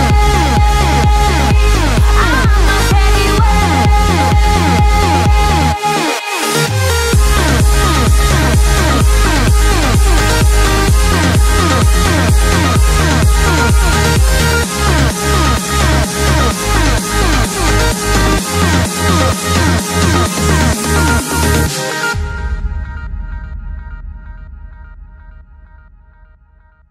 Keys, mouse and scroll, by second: 1.1-1.5 scroll down 2, 1.5 scroll up 1, 1.6-2.8 scroll down 1, 2.9-6.3 drag, 6.3 Tab, 8.3 Tab, 8.8 click, 9.4-10.0 scroll down 4, 10.4 click, 11.3 scroll down 2, 11.5-13.3 middle drag, 13.3-14.7 scroll up 9, 14.7 Tab, 15.9 click, 17.0 shift+click, 17.5 x, 18.6 Tab, 19.6-20.6 scroll down 14, 24.0 Tab, 24.4 Tab, 25.1 a, 26.0 a, 26.7 Tab.